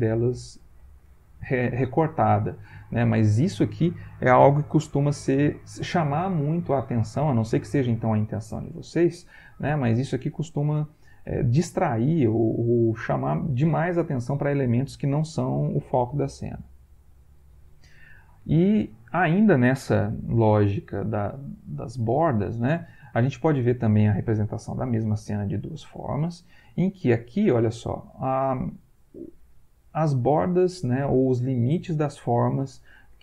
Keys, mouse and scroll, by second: 16.8 Right.